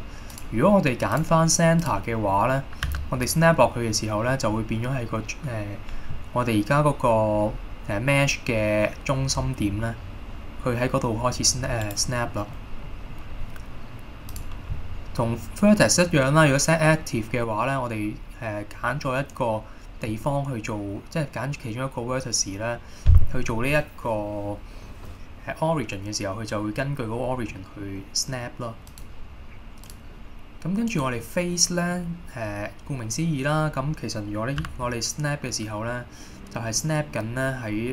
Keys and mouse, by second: 0.6-1.8 drag, 1.9 click, 2.4 middle drag, 3.0 g, 11.9 right click, 12.4 middle click, 12.9 middle click, 14.6-17.2 drag, 27.6 middle click, 29.0-30.4 drag, 31.3-32.0 middle drag, 34.8 g.